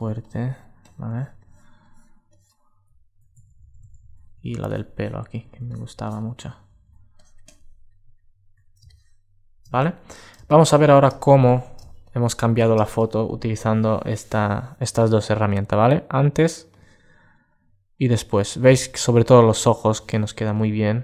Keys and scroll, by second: 2.5 alt+space, 6.3 alt+space, 7.5 alt+space.